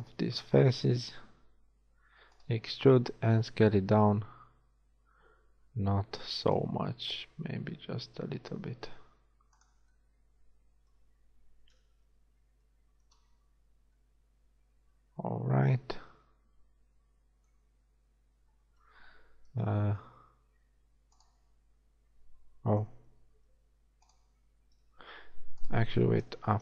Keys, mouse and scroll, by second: 0.9 middle click, 0.9 shift+KP_7, 2.0 s, 3.1 s, 7.5 s, 11.7 KP_1, 18.5-19.6 scroll down 1, 19.6-21.2 scroll down 1, 19.6 g, 22.9 g, 25.0 g, 26.2 KP_7.